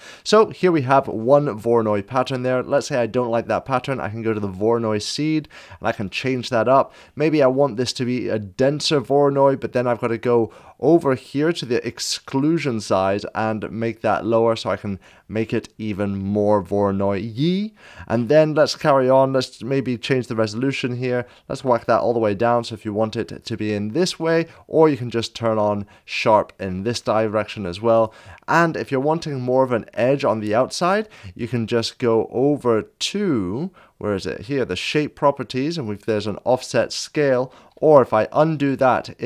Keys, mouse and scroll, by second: 0.8 scroll down 1, 4.0-9.9 drag, 6.1 scroll down 1, 12.3 click, 13.1-29.9 drag, 31.0 scroll up 1, 33.5 scroll down 1, 35.8 click, 35.8 scroll up 1, 36.0 scroll down 1, 38.7 scroll down 1.